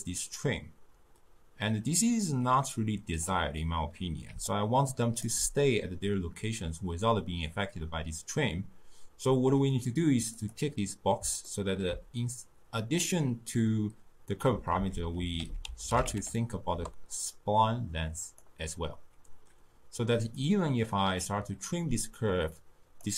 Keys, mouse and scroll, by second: 0.0-3.1 drag, 4.3 d, 4.5 right click, 5.3 d, 10.4 click, 11.5-14.6 ctrl+middle drag, 14.8 ctrl+a, 20.4-23.1 drag.